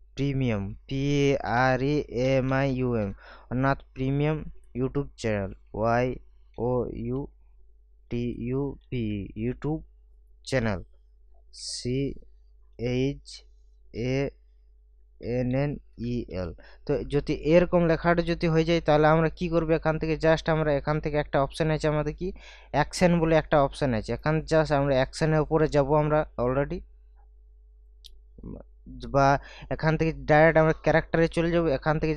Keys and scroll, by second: 0.5-3.5 typing, 5.5 shift+y, 6.6-9.6 typing, 11.6 shift+c, 12.8 h, 13.9 a, 15.2 n, 16.0 e, 16.3 l, 18.5 ctrl+a.